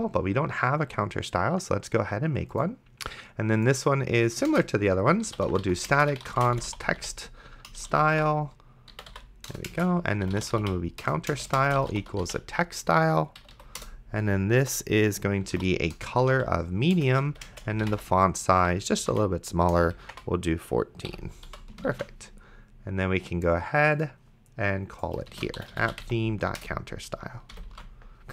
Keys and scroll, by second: 4.7-12.7 typing, 13.4 Down, 13.8 Return, 15.2-21.5 typing, 17.0 Return, 19.7 Return, 21.1 End, 22.2 ctrl+s, 25.3-27.5 typing, 26.6 Return, 28.0 ctrl+s.